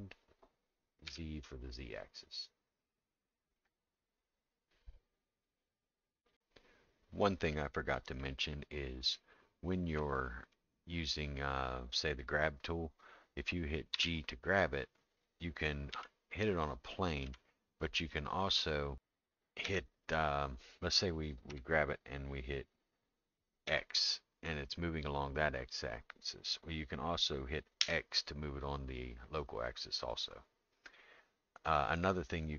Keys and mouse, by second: 8.2 middle click, 9.1 shift+middle click, 10.5-12.1 middle drag, 13.9 g, 19.6 x, 21.5 g.